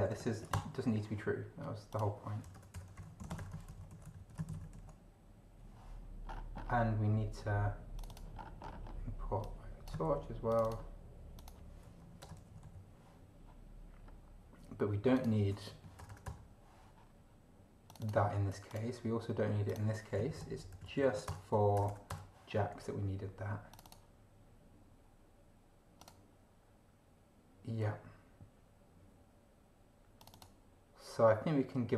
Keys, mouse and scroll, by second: 0.5 ctrl+shift+BackSpace, 1.9 click, 2.6-3.7 typing, 3.9 ctrl+shift+c, 4.0 ctrl+shift+Down, 4.3 ctrl+shift+Home, 4.5 ctrl+shift+Right, 4.8 ctrl+shift+v, 6.2 scroll up 2, 8.0 click, 8.4-8.8 scroll up 2, 9.4 click, 10.0 ctrl+c, 10.5 ctrl+click, 11.4 click, 12.0 End, 12.2 Return, 12.6 ctrl+Down, 14.0 scroll down 1, 15.2 click, 15.7 Right, 16.0 BackSpace, 17.9 click, 18.7 click, 19.7 click, 20.3 ctrl+shift+Left, 21.2 ctrl+shift+BackSpace, 21.5 ctrl+shift+Home, 21.8 ctrl+shift+BackSpace, 23.7 click, 26.0 click, 30.2 click.